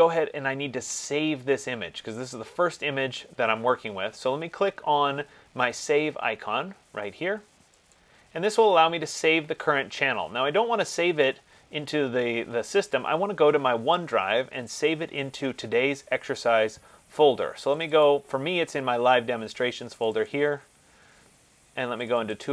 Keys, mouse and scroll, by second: 8.2 click, 14.4 click, 18.0 click, 18.3 click, 20.2 click, 20.5 click, 22.2 click.